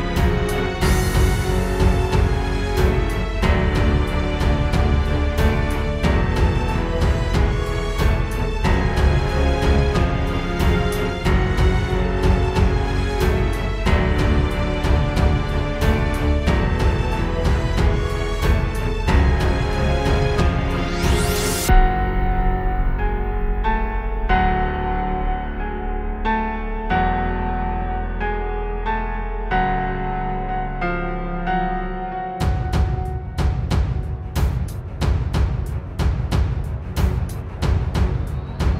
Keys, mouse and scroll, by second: 1.4 click, 3.8 click, 6.8 space, 10.5 click, 10.7 click, 13.9 right click, 21.3 click, 24.9 scroll down 2, 25.1 middle click, 25.5 middle click, 28.2 KP_0, 30.8 click, 34.9 middle click, 35.2-36.6 scroll up 15, 36.4 middle click, 38.0-38.6 scroll up 1.